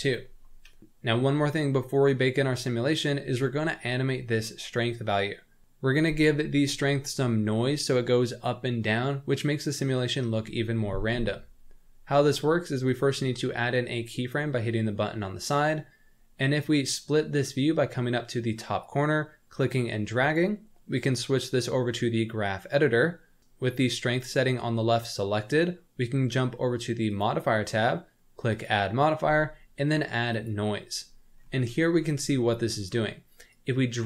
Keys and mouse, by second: 12.8 click, 18.8-20.3 drag, 21.1-22.6 drag, 27.0 click, 28.6-30.4 drag, 31.8 middle click, 32.4 middle click.